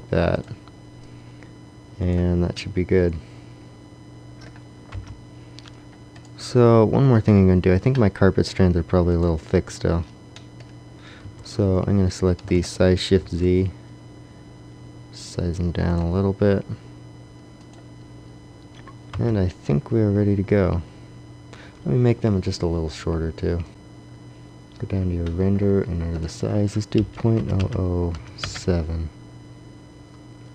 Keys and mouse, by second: 1.0 click, 1.7-2.9 drag, 4.9 KP_0, 6.3-8.0 drag, 9.6-10.7 drag, 11.1 a, 12.3 s, 14.6 s, 15.8-19.3 drag, 19.1 KP_0, 23.6-28.6 drag, 27.5 KP_0.